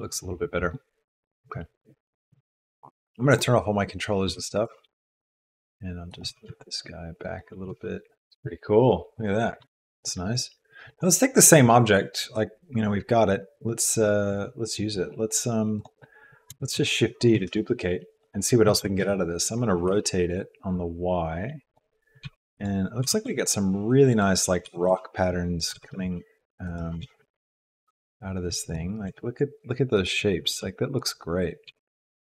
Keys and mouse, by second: 4.3 g, 6.3 g, 7.7 r, 8.2 g, 8.3 Tab, 9.7 Tab, 15.7 click, 16.9 shift+d, 18.7 r, 22.2 g, 23.0 g, 24.6 g, 25.7 g, 27.0 g, 29.0 g, 30.5 g, 31.6 g.